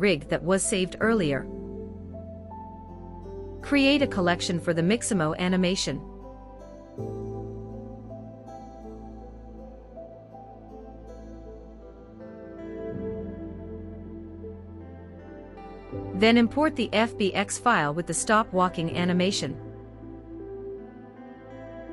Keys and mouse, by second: 3.4 click, 5.5-7.5 drag, 7.5 shift+middle click, 11.1 middle click, 11.9 click, 13.4-15.6 drag, 16.6-18.0 drag.